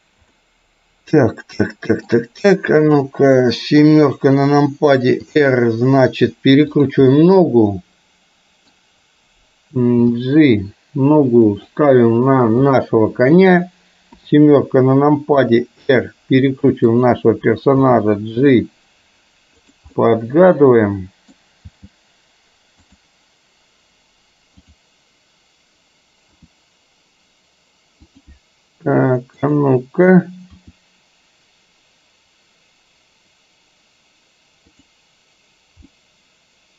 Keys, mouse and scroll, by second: 0.4-2.1 middle drag, 2.9 click, 3.9 KP_7, 5.4 r, 7.1-8.8 middle drag, 10.0 g, 12.6 click, 14.3 KP_7, 15.5 r, 17.9 g, 20.0-21.5 middle drag, 21.8 g, 24.8 click, 26.4 r, 29.5 click, 30.6 r, 36.0-36.7 middle drag.